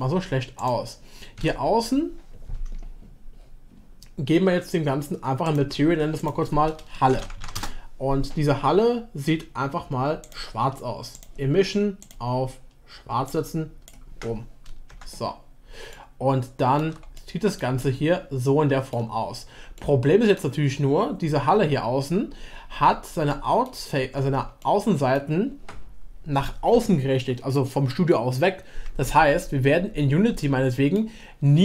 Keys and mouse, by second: 1.4 a, 3.6 a, 5.6 click, 6.3-8.3 drag, 7.4 l, 10.3-12.2 drag, 14.9 Tab, 15.7 shift+Tab, 15.9-16.8 shift+middle drag, 17.1 middle click, 17.8-18.9 shift+middle drag, 19.7-20.4 middle drag, 23.2 middle click, 24.0 Tab, 24.6-25.2 middle drag, 30.4-31.6 middle drag.